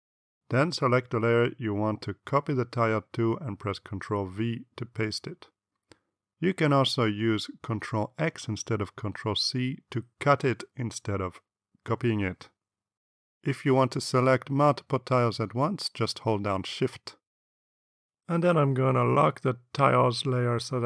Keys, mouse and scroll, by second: 0.0 ctrl+x, 3.6 click, 4.6 ctrl+v, 5.7-8.4 drag, 9.1 click, 10.0 click, 10.5 shift+click, 11.4 shift+click, 16.4 shift+click, 17.1 shift+click, 18.5 shift+click, 20.1 ctrl+c, 20.5 ctrl+click.